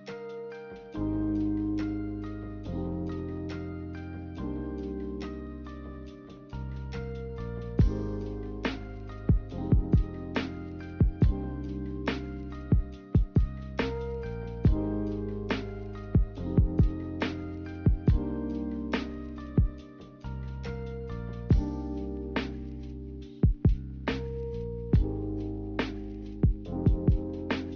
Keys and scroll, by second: 1.9-2.7 typing, 4.7-5.4 typing, 7.1 a, 18.8 z, 24.0 Delete.